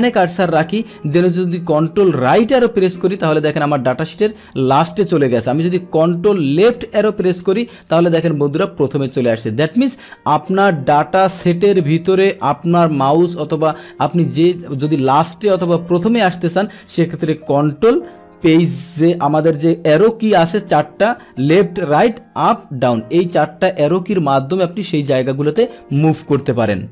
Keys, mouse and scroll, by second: 2.3 ctrl+Right, 6.7 ctrl+Left, 9.8 click, 10.9-12.4 drag, 13.5 click.